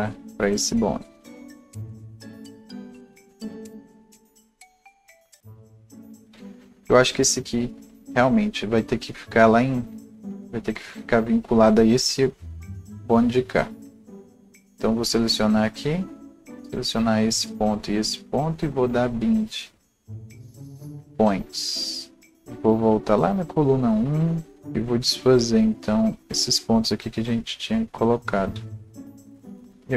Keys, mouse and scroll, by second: 1.1 click, 4.0 ctrl+z, 4.0-6.2 alt+drag, 6.2 ctrl+z, 8.7-14.7 drag, 16.5 alt+click, 20.2 shift+click, 22.3 shift+click, 23.6-29.9 drag, 28.2 ctrl+a, 29.5 Delete.